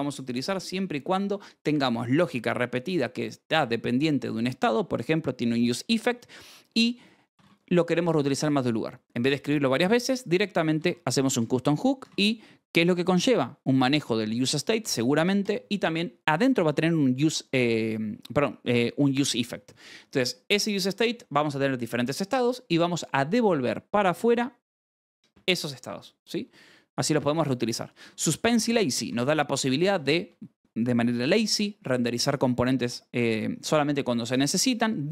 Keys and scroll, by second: 6.9-7.8 typing, 10.3-12.0 typing, 13.0 Escape, 26.5-30.3 typing, 34.4 Escape, 34.6 k.